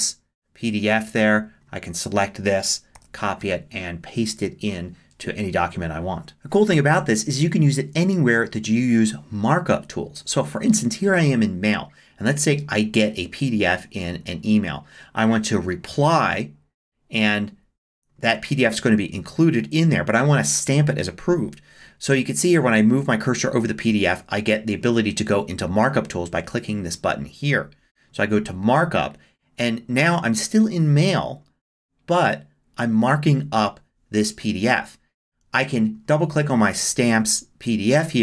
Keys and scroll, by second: 2.9 super+c.